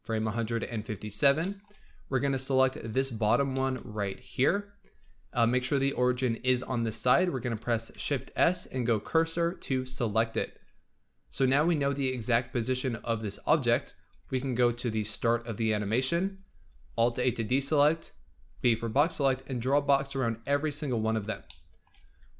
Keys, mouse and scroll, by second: 0.9-1.3 scroll up 3, 1.3 shift+middle click, 1.7-2.7 scroll up 4, 2.7 click, 3.1-3.4 scroll up 1, 3.4 shift+middle drag, 3.7-4.2 scroll up 1, 4.2 click, 4.9-5.2 scroll up 2, 7.8 shift+s, 11.4 Tab, 12.1 Tab, 13.3-14.2 scroll down 12, 14.2 shift+middle click, 15.2-15.8 drag, 15.8-16.9 shift+middle drag, 16.9 alt+a, 18.4 b, 21.4 shift+middle click, 21.8-22.3 scroll up 4.